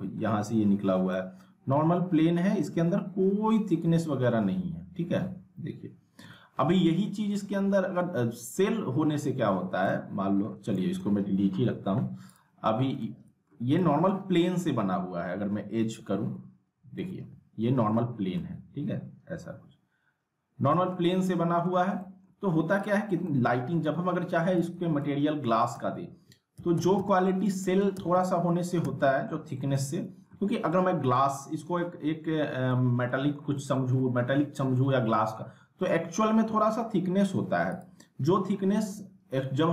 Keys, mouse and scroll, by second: 1.0 scroll down 1, 1.1-6.9 alt+middle drag, 7.3 ctrl+z, 9.9-10.5 alt+middle click, 12.3 click, 12.6 z, 13.0-13.6 alt+middle click, 13.6 scroll up 1, 13.8 alt+middle click, 15.3 F4, 17.1-18.0 alt+middle click, 18.3-21.7 alt+middle drag, 22.0 alt+scroll down 1, 22.8 click, 23.2-23.9 alt+middle click, 23.6 alt+scroll down 1, 24.5 click, 24.7-28.8 typing, 25.0-25.6 alt+middle click, 27.2 scroll up 1, 27.5-28.1 alt+middle click, 28.2-28.8 alt+middle click, 29.0 alt+middle click, 29.5 scroll up 2, 29.7-30.4 alt+middle click, 30.6-31.1 scroll up 1, 31.3-31.9 alt+middle click, 32.4 scroll down 2, 32.7 middle click, 32.7-34.2 alt+middle drag, 34.2 scroll up 2, 34.8-35.4 alt+middle click, 35.6 scroll up 1, 35.8 alt+middle click, 37.7 click, 38.8 s.